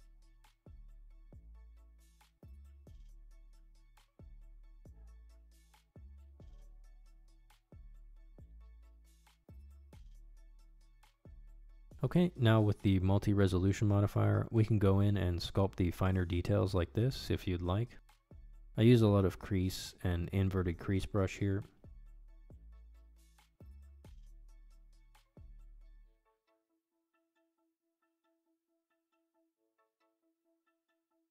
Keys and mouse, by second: 0.1 click, 0.2 middle drag, 0.7 shift+middle click, 0.9-1.4 shift+middle drag, 1.4 shift+d, 2.0 click, 3.6 ctrl+Tab, 4.2 click, 5.5 click, 5.9 click, 6.3 click, 7.1 ctrl+Tab, 7.4 click, 8.7 drag, 9.4 middle click, 9.8 click, 10.2 middle drag, 10.5 shift+middle drag, 10.9 middle click, 11.5 shift+c, 11.5 f, 11.7 ctrl+click, 11.9 ctrl+click, 12.4 ctrl+click, 12.6 ctrl+click, 12.9 click, 13.1 click, 13.6 middle click, 13.7 ctrl+z, 13.7 ctrl+x, 13.9 click, 14.4 click, 14.9 click, 15.5 middle click, 15.7 ctrl+z, 15.8 middle click, 15.9 shift+middle click, 16.2 middle click, 16.4 click, 16.8 click, 17.1-21.1 typing, 17.4 ctrl+click, 17.7 middle click, 18.2 click, 19.6 click, 19.9 middle click, 20.2 ctrl+click, 20.6 middle click, 20.9 shift+click, 21.5 click, 21.8 middle click, 22.1 click, 22.6 ctrl+shift+middle click, 23.3 middle click, 23.5 click, 23.9 middle click, 24.0 click, 24.3 middle click, 24.5 click, 25.0 click, 25.7 click, 25.9 click, 26.7 shift+c, 26.8 ctrl+click, 27.0 ctrl+click, 27.2 middle click, 27.3 ctrl+click, 27.9 ctrl+click, 28.3 click, 29.1 click, 29.7 click, 30.5 ctrl+click.